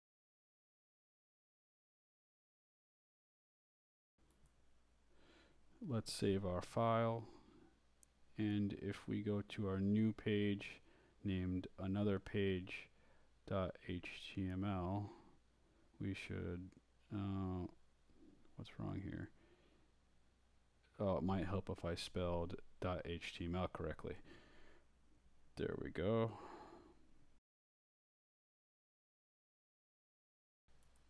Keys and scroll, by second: 0.0-1.0 typing, 2.8 Return, 10.5-14.9 typing, 25.9 BackSpace, 27.6-30.2 typing.